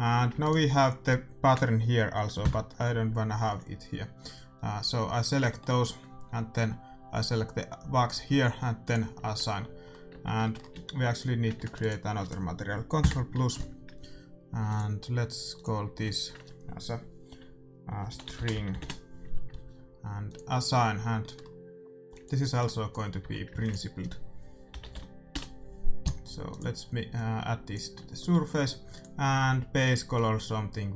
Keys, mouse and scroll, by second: 0.1 a, 0.4-2.2 right drag, 2.3 ctrl+KP_Add, 8.8-10.6 drag, 9.4 Tab, 10.1 Tab, 10.6-12.7 middle drag, 10.7 a, 11.1-12.8 right drag, 13.0 ctrl+KP_Add, 14.6-17.8 drag, 17.9 click, 20.2-24.3 drag, 21.1-22.1 middle drag, 22.1-23.2 right drag, 23.2 x, 23.5 shift+a, 27.1-30.7 drag, 28.7-30.5 middle drag.